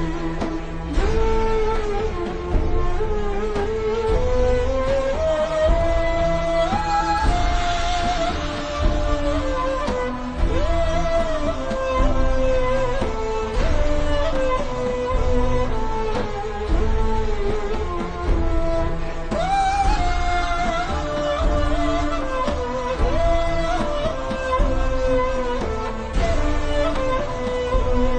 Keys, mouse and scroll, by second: 2.0-3.3 alt+shift+scroll up 6, 3.6 click, 8.2 scroll up 1, 9.0 click, 17.4 v, 17.6 click, 19.9 click, 23.2 click, 26.0 click.